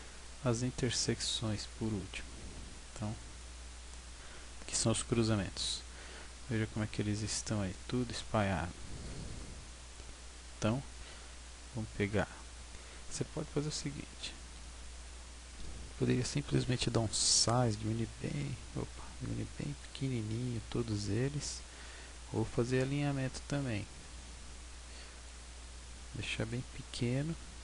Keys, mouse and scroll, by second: 0.1 right click, 1.7-2.2 scroll down 7, 3.4 click, 5.5 Tab, 6.2-8.3 scroll down 16, 8.3-9.0 scroll up 5, 9.0-9.6 scroll down 2, 9.6 scroll up 1, 12.9-13.4 scroll up 2, 13.4-14.5 scroll down 1, 14.5 scroll down 2, 17.2 s, 20.1 click, 20.1 scroll up 2, 20.4 scroll down 1, 20.4 scroll down 1, 21.5 s, 23.6 click, 24.2 s, 25.2 s, 26.4 click, 27.1 scroll up 5.